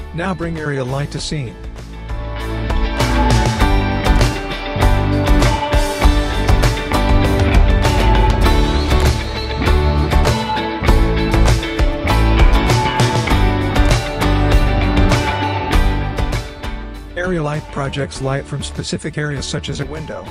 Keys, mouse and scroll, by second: 0.5 click, 3.3-7.2 drag, 12.2-13.2 click, 13.3 r, 13.9-14.8 click, 15.2 e, 16.8-20.3 typing.